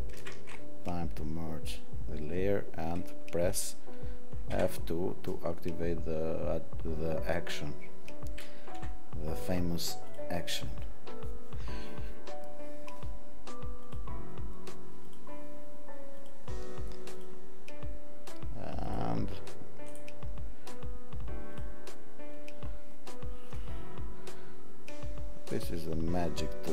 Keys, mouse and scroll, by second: 0.1 ctrl+shift+e, 0.1 alt+scroll.